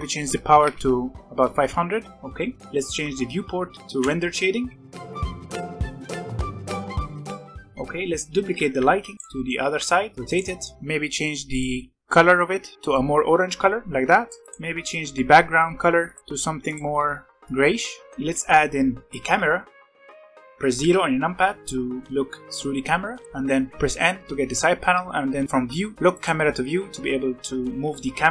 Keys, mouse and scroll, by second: 0.8 KP_0, 2.1 scroll up 1, 2.3 middle click, 2.9 z, 4.6 middle click, 5.0-5.5 scroll down 2, 5.5 click, 6.1 click, 6.2-6.6 scroll down 1, 6.8 scroll up 1, 6.8-8.0 middle drag, 8.0-8.4 scroll down 1, 8.8 alt+a, 9.1 middle click, 9.5 r, 10.3 middle click, 10.7-11.4 scroll up 1, 11.4 click, 14.4 click, 16.0 click, 16.2 click, 18.1 middle click, 18.1 alt+a, 18.9 shift+a, 20.5 g, 20.8 KP_0, 22.0 scroll down 1, 22.1 n, 23.1 click, 23.6 n, 23.8 n, 26.1 click, 26.7 n, 27.8-28.3 shift+middle drag.